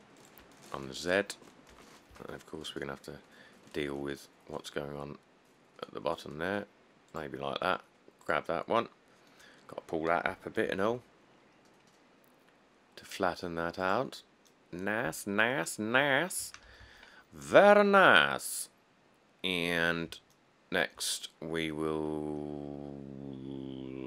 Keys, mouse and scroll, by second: 2.0 g, 2.3 z, 9.7 middle click, 9.7 middle click, 10.5 g, 10.9 z, 16.0-16.5 scroll, 17.0 1, 17.6 middle click, 17.7 middle click, 18.4 middle click, 18.5 middle click, 19.0 middle click, 19.7 middle click, 19.8 middle click, 21.9 middle click, 22.1 middle click, 22.5 middle click, 22.6 middle click, 22.7 middle click.